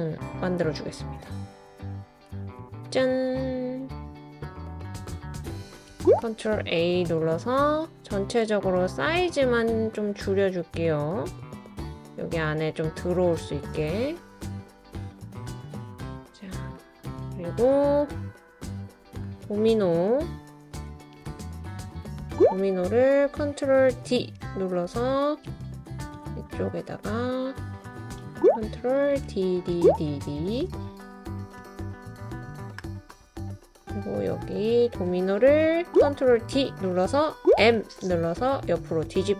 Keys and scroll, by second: 6.2 super+a, 21.9 Page_Up, 23.9 super+d, 29.2 super+d, 29.6 super+d, 29.9 super+d, 36.3 super+d, 37.5 m.